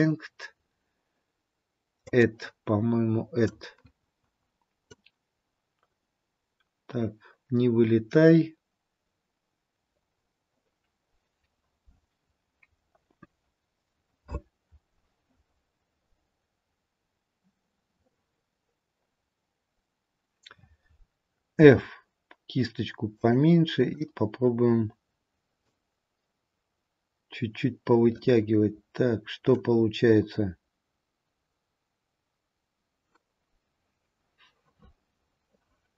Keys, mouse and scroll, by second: 2.2 click, 6.2 click, 17.4-18.2 scroll up 6, 18.4-19.8 scroll down 1, 20.3-21.3 scroll down 3, 26.8 click.